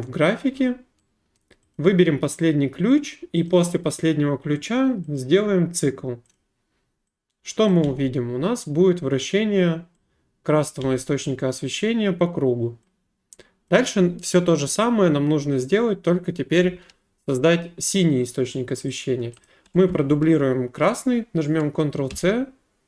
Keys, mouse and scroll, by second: 1.3 right click, 1.7 click, 3.5 click, 5.1 click, 7.8 space, 10.7 click, 10.8 space, 13.7 click, 19.0 click, 19.4 click, 22.1 ctrl+c.